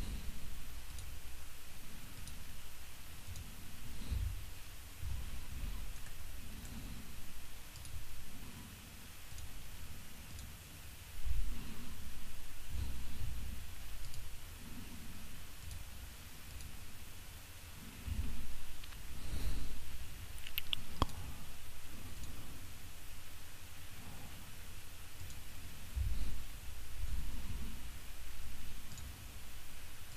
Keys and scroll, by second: 4.1 6, 11.3 6, 18.1 6, 25.9 6.